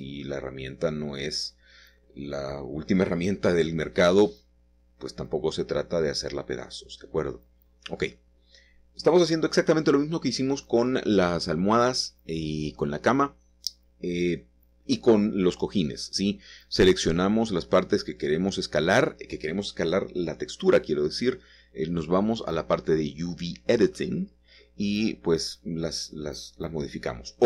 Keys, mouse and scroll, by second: 0.2 shift+middle click, 1.1 middle click, 1.3 middle click, 1.5-3.6 shift+middle drag, 3.6 click, 4.4 shift+click, 5.0 shift+click, 5.6 shift+click, 8.0 typing, 9.7 click, 10.3 shift+middle click, 10.8 shift+middle click, 13.1 middle click, 14.4 shift+middle click, 15.4 click, 18.0 shift+click, 22.6 click, 23.0 click, 23.7 shift+middle click, 25.4 shift+click.